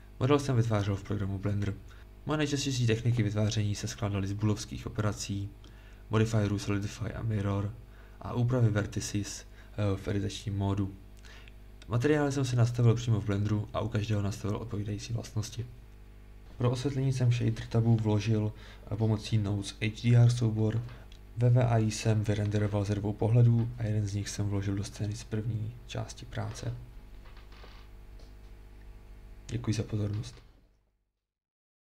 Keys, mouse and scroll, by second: 1.2-3.6 middle drag.